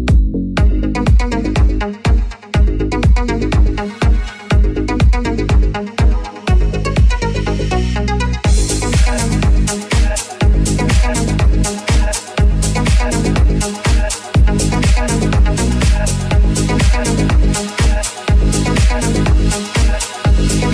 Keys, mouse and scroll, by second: 2.0 right click, 2.6 shift+right click, 3.3 f, 4.5 alt+z, 5.2 right click, 5.8 alt+z, 6.2 shift+right click, 6.2-9.6 shift+middle drag, 9.6 shift+right click, 9.7-15.5 shift+middle drag, 10.5 f, 10.5 alt+z, 11.8 ctrl+z, 14.3 alt+z, 15.5 right click, 15.6 middle click, 16.3 right click, 16.4-20.7 middle drag, 17.3 right click, 18.0 g.